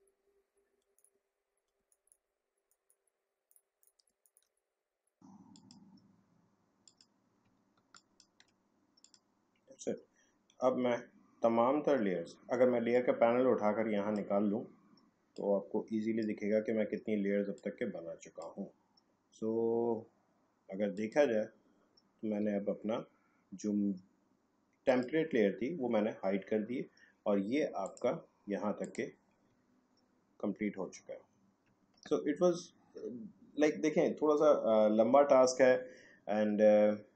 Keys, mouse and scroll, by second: 0.6 alt+scroll up 1, 0.9 click, 1.2 alt+scroll down 1, 1.8 space, 1.9 click, 2.1 space, 2.6 click, 4.2 ctrl+click, 5.5 click, 7.9 ctrl+click, 12.9-20.8 drag, 20.9 click, 22.5 alt+scroll down 1, 23.2-23.6 alt+scroll up 1, 24.9 click, 27.8 click, 29.6-30.0 alt+scroll up 1, 30.3 alt+scroll down 1, 31.2-31.6 alt+scroll up 1.